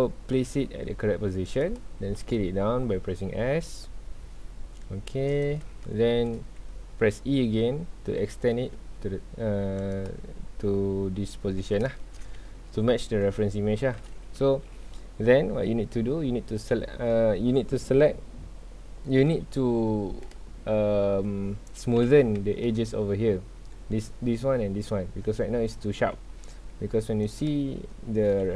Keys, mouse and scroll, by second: 1.6 click, 2.2 s, 5.4 click, 5.8-7.7 shift+middle drag, 7.7 e, 9.9 click, 12.0 shift+middle click, 12.3 alt+a, 14.4 2, 16.7 scroll down 1, 19.4 scroll up 1, 19.6 Tab, 20.0 scroll down 1, 20.2-22.0 middle drag, 22.0 KP_1, 22.4 Tab, 22.7 scroll up 1, 27.2 click, 28.4 z.